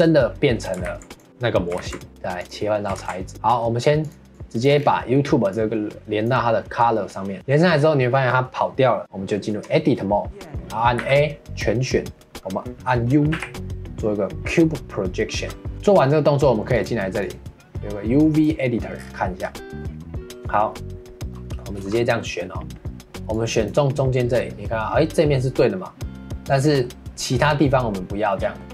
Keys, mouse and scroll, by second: 0.0 middle click, 0.8 ctrl+s, 1.1 click, 1.8 ctrl+s, 2.1 Tab, 2.5 click, 3.5-4.0 middle drag, 4.0 click, 4.3 click, 5.5-7.4 drag, 7.4 scroll up 2, 9.0 Tab, 11.0 a, 13.3 u, 15.7 ctrl+s, 16.7-19.0 drag, 19.0-21.3 scroll down 2, 21.3 middle click, 21.7 3, 22.4 middle click, 23.3 click, 26.3-28.7 middle drag.